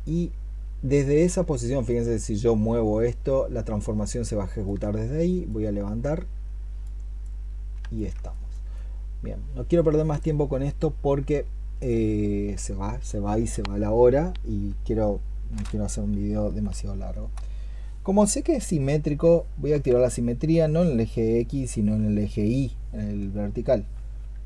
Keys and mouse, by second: 1.7 alt+click, 8.1 alt+click, 16.3 i, 16.5 i, 17.0 i, 19.5 x.